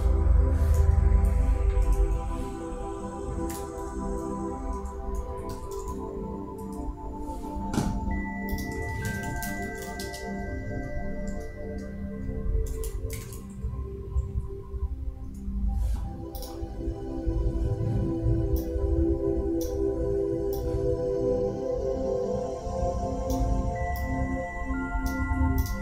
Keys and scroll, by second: 8.9-9.8 typing, 10.9 shift+space, 12.9 shift+y.